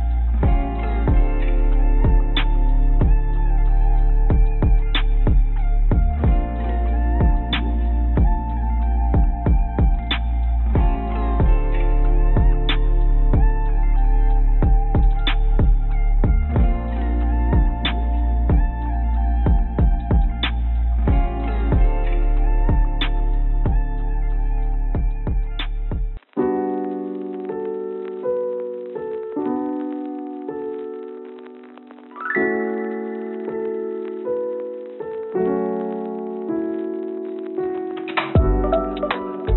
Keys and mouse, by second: 2.0 click, 2.1 click, 2.2 click, 3.1 click, 3.6 click, 9.0 Tab, 9.9-13.5 drag, 13.8 right click, 15.5-17.1 drag, 18.3-20.4 middle drag, 21.2 ctrl+z, 21.4 ctrl+z, 21.6 ctrl+z, 23.3 click, 25.0 ctrl+b, 27.9 click, 29.8 click, 30.5 Tab, 31.4-34.5 drag, 34.9-36.3 drag, 37.7 click, 38.7-39.5 drag.